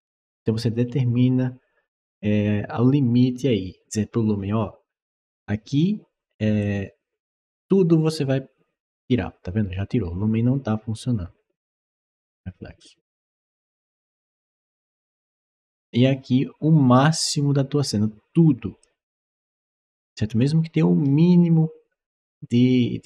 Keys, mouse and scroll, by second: 6.4-18.6 drag.